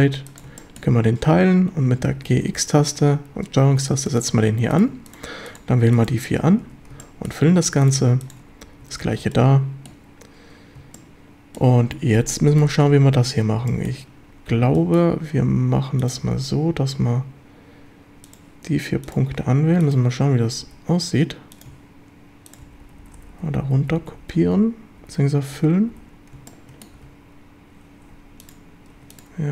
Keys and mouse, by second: 0.6 shift+drag, 2.1 g, 2.4 x, 4.0 ctrl+click, 5.1-6.2 shift+drag, 6.6 a, 7.0 shift+drag, 8.5 f, 8.8 a, 9.3 shift+click, 10.9-11.6 shift+drag, 12.3-12.6 shift+drag, 13.7 shift+drag, 14.7 shift+middle drag, 19.0 shift+click, 19.8 shift+click, 22.6-27.0 typing, 26.5 shift+middle click, 28.9 2.